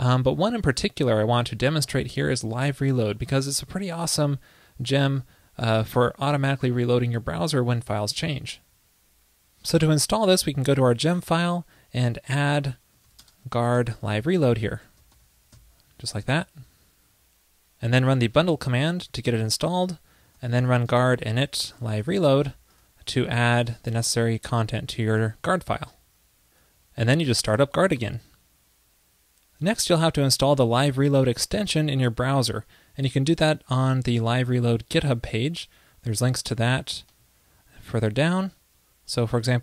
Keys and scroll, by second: 16.3 super+c, 16.5 super+s.